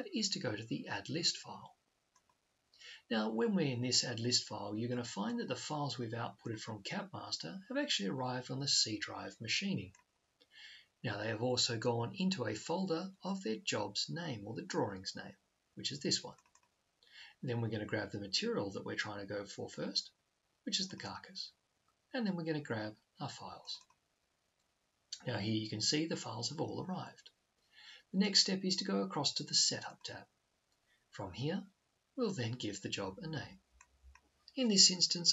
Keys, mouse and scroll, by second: 2.0-3.8 drag, 9.8-11.6 drag, 16.2-18.0 drag, 20.6 double click, 23.3 double click, 30.0 click.